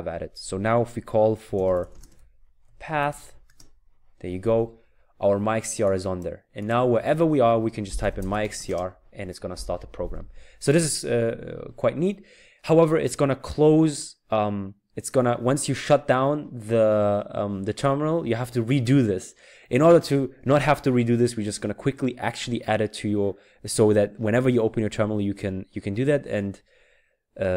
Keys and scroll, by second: 1.2-3.6 typing, 7.7-8.9 typing.